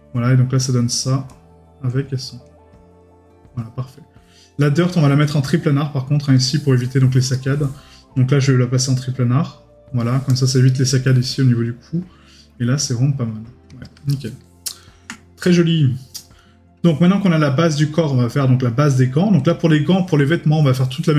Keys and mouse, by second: 7.3 right click, 14.1 right click, 14.8 middle click.